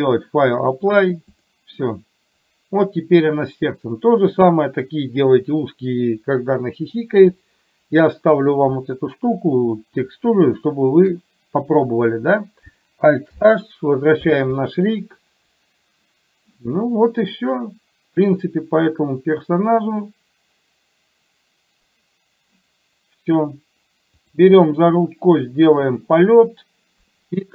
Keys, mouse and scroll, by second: 1.5 click, 4.3 click, 10.6 shift+middle click, 13.4 alt+h, 24.4 click.